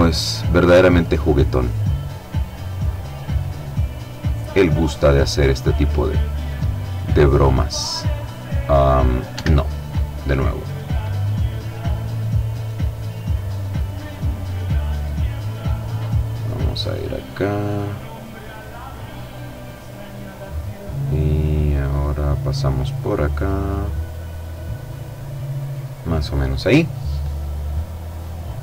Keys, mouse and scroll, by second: 5.5 click, 6.1 click, 8.3 Escape, 9.6 click, 10.6 click, 12.1 click, 13.7 click, 15.8 click, 16.6 click, 17.5 click, 18.3 click, 20.9 click, 21.7 click, 23.9 click, 24.6 click, 27.6-28.6 middle drag.